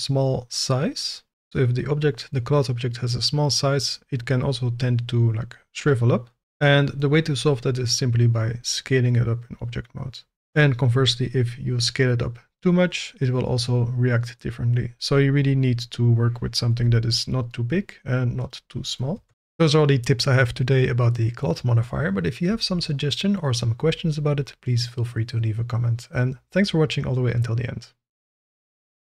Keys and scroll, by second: 16.8 n, 19.1 Tab.